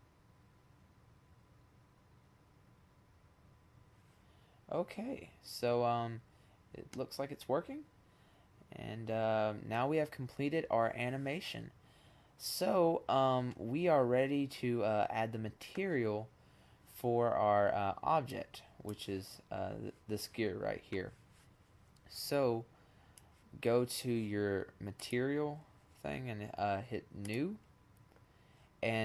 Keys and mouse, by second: 5.2-6.0 middle drag, 6.2 middle click, 6.4 middle drag, 7.4 middle click, 7.6 middle click, 11.5 middle click, 13.1-14.5 middle drag, 15.2 middle click, 17.5-19.1 drag, 22.2 click, 22.4 click, 24.6-25.9 drag, 26.2 click.